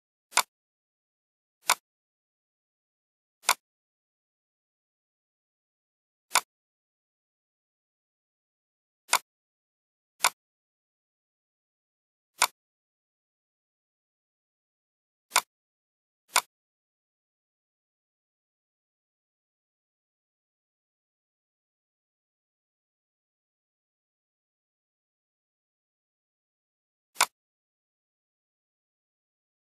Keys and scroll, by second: 20.9 Left, 24.0 Right.